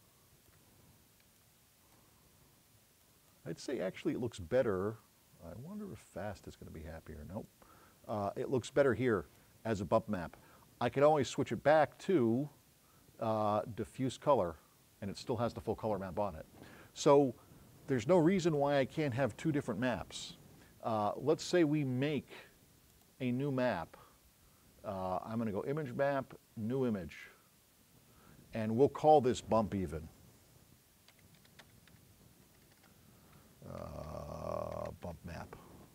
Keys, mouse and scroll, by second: 0.0 click, 1.4 click, 8.8-9.2 scroll up 4, 11.4 right click, 14.3 click, 23.0 click, 27.2 click, 31.5 u.